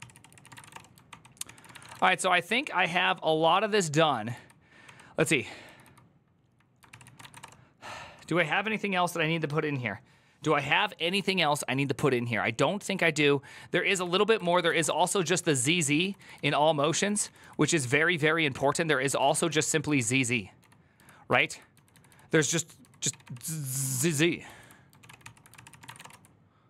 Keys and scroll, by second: 0.0-2.1 typing, 0.2 ctrl+c, 0.3 ctrl+:, 0.5 Return, 0.9 ctrl+d, 2.2 ctrl+d, 5.4 typing, 6.7 ctrl+c, 6.7-7.5 typing, 14.2-23.5 typing, 15.3 ctrl+u, 21.2 ctrl+d, 23.9 ctrl+k, 24.2 ctrl+j, 24.8 ctrl+w, 24.8 ctrl+o, 25.0 ctrl+c, 25.6-26.6 typing.